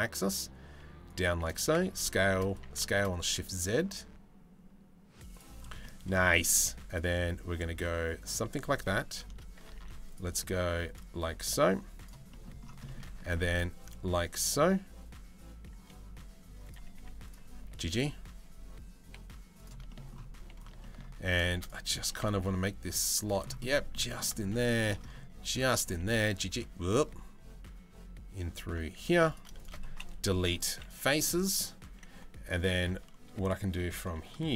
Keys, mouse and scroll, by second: 1.2 s, 2.2 s, 5.4 middle click, 6.1 ctrl+r, 8.5 3, 8.7 click, 9.3 ctrl+r, 11.9 middle click, 12.4 shift+middle click, 12.8 ctrl+r, 16.9 click, 17.2 g, 19.5 shift+middle click, 20.4 shift+middle click, 21.5 g, 23.2 middle click, 23.7 shift+middle click, 24.2 shift+middle click, 25.3 g, 28.7 3, 29.2 shift+click, 29.7 Delete, 31.4 1, 31.7 2, 32.1 click.